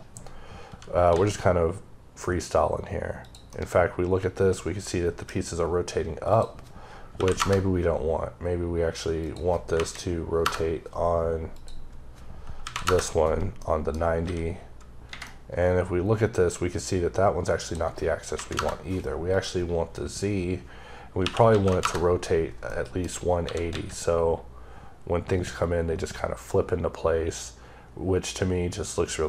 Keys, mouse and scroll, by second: 0.6 g, 3.1 click, 3.4 middle click, 6.2 click, 7.0 KP_9, 7.2 KP_Enter, 9.1 click, 9.6 KP_0, 10.3 KP_Enter, 11.4 click, 12.5 KP_9, 12.7 KP_Enter, 13.5 middle click, 14.1 g, 15.1 middle click, 17.5 click, 18.2 KP_0, 18.4 KP_Enter, 19.2 click, 21.1 KP_1, 21.5 KP_6, 21.7 KP_Enter, 22.5 middle click, 23.3 g, 25.8 typing.